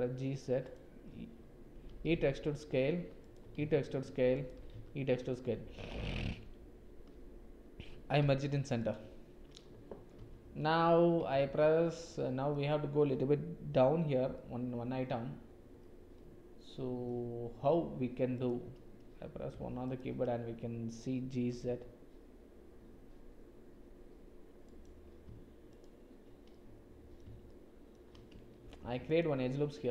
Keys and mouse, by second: 1.8 e, 3.4 e, 4.5 e, 8.2 m, 11.3 2, 11.9 click, 14.3 click, 14.7-15.7 middle drag, 16.1 middle click, 18.3 click, 19.9 click, 21.5 g, 25.6 shift+click, 26.5 middle click, 27.4 shift+middle click, 28.6 ctrl+r.